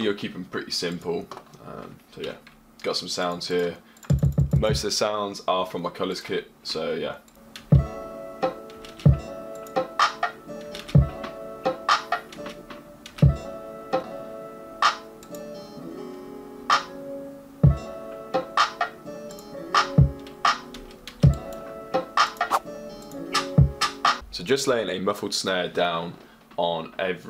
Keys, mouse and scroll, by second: 1.2 F1, 5.6 click.